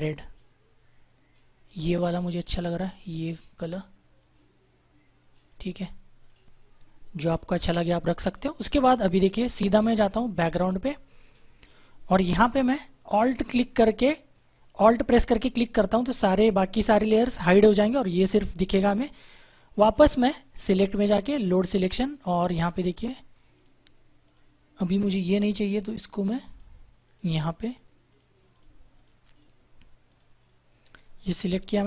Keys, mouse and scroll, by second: 10.8 click, 15.5 alt+click, 20.6 click, 31.7 ctrl+=.